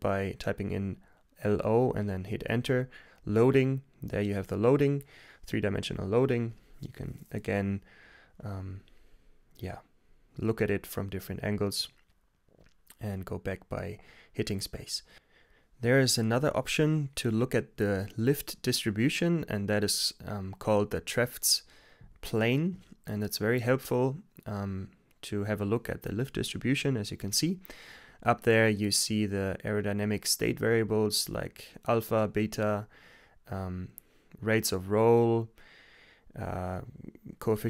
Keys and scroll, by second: 0.1-0.9 typing, 3.5 k, 3.7 Return, 5.3-7.5 typing, 13.1 space, 14.0 Return, 15.9-17.0 typing, 18.8 Return, 22.3 t, 22.9 Return.